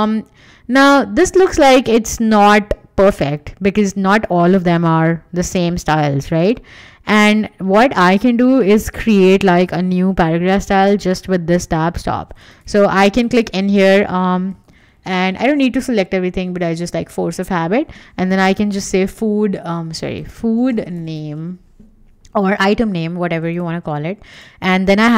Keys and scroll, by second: 14.6 super+a, 18.1 Right, 18.5-21.6 typing, 19.7 super+a, 22.6 Escape.